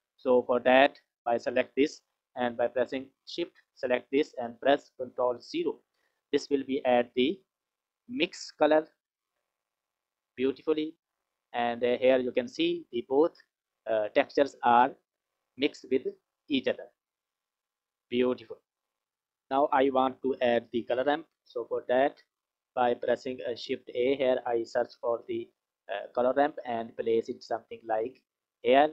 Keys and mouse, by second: 0.7 click, 3.5 shift+click, 5.3 ctrl+KP_0, 7.0 click, 8.0 click, 15.8 click, 17.0 click, 19.0 F6, 22.4 click, 23.6 shift+a, 28.2 click, 28.4-28.9 drag.